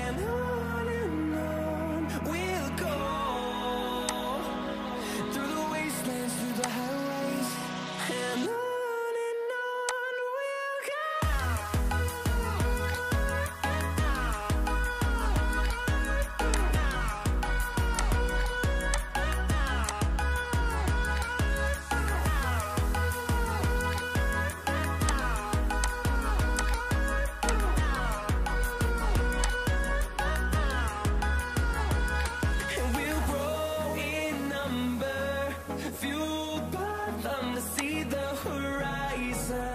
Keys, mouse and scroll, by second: 16.4 shift+click, 17.9 shift+click, 18.8 shift+click, 32.6 ctrl+z.